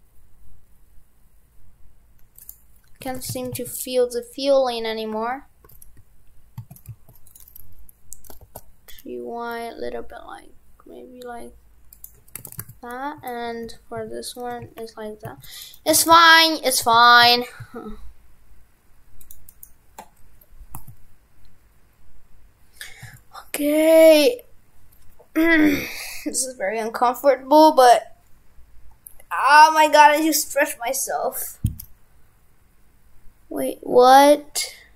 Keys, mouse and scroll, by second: 3.1 shift+f, 12.4 shift+f, 15.8 right click, 15.9 right click, 16.0 shift+f, 19.5 right click.